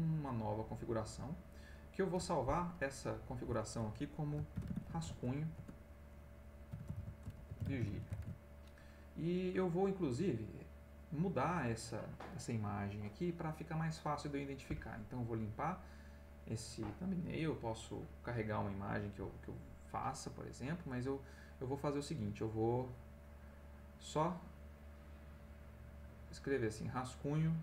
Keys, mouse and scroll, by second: 0.6 click, 3.0 click, 4.2-8.6 typing, 20.9 click, 22.8-27.0 drag, 27.2-27.6 drag.